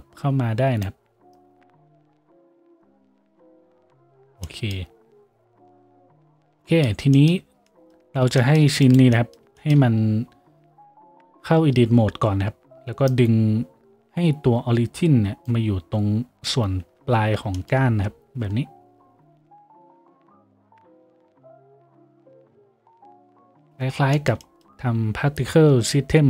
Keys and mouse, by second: 12.2 Tab, 19.0 g, 24.0-26.2 shift+middle drag, 25.5 Tab.